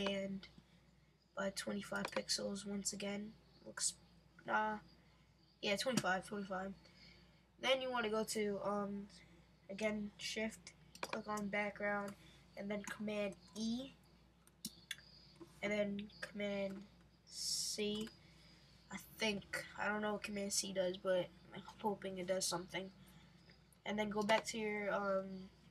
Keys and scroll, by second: 13.3 super+e, 17.8 super+c.